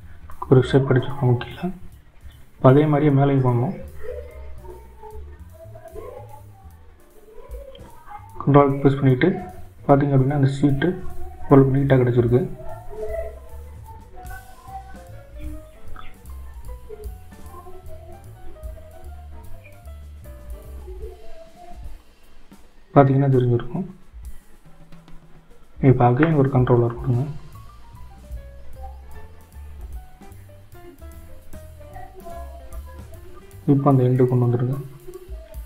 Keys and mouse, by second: 7.4 ctrl+r, 21.2-28.0 drag, 30.4 ctrl+r.